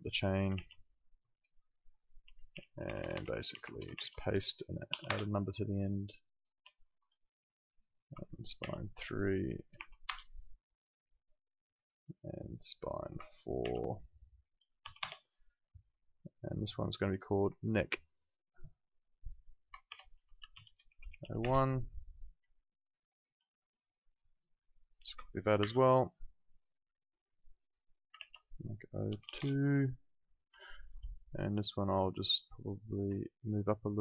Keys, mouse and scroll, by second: 1.4 BackSpace, 2.5 ctrl+v, 2.7 BackSpace, 3.9 ctrl+v, 4.9 2, 5.0 Return, 6.3 click, 7.4 alt+middle click, 7.7 click, 8.6 ctrl+v, 9.7 3, 10.0 Return, 11.8 click, 13.6 ctrl+v, 14.8 4, 15.0 Return, 16.9 click, 19.6-21.7 typing, 22.6 alt+middle click, 22.9 alt+right click, 24.1 click, 25.6 ctrl+c, 26.0 click, 28.7 ctrl+v, 29.1 BackSpace, 29.2 2, 29.3 Return, 30.6 alt+middle click, 31.5 click, 33.2 alt+middle click, 33.5 alt+right click, 33.9 alt+middle click.